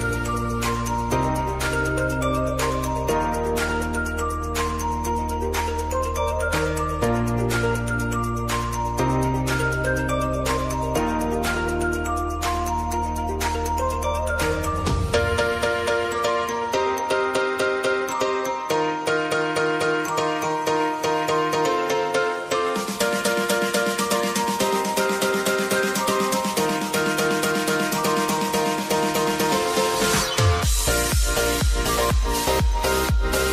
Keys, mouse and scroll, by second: 3.0 click, 6.7-12.4 typing, 8.1 shift+Return, 10.9 shift+Return, 13.1 ctrl+a, 14.3 click, 17.7-31.4 drag, 31.4 click.